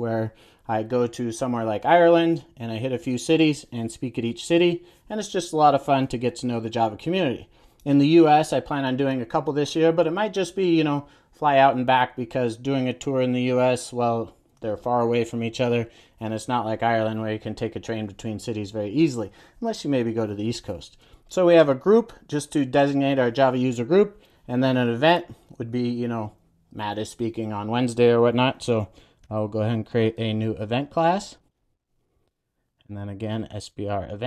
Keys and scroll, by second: 29.1 super+n, 32.7 super+a.